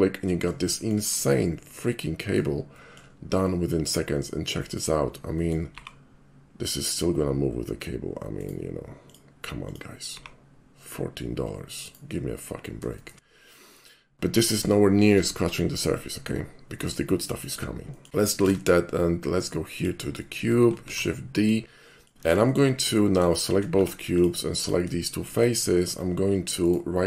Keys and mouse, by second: 0.7 shift+middle click, 1.1 shift+middle drag, 1.4-2.4 shift+middle drag, 2.7 shift+middle click, 3.5 shift+middle click, 5.3 middle click, 5.8 g, 8.4 right click, 9.1 click, 9.7 click, 10.2 g, 11.9 right click, 13.0 middle drag, 13.7 middle click, 17.4 middle click, 17.9 shift+middle click, 18.1 x, 18.4 shift+a, 19.8 click, 20.2 shift+middle click, 20.8 shift+middle click, 20.8 shift+d, 21.4 click, 21.9 middle click, 22.5 shift+middle click, 23.3 shift+click, 23.8 Tab, 24.1 click, 24.6 click, 25.8 shift+middle click, 26.7 shift+right click.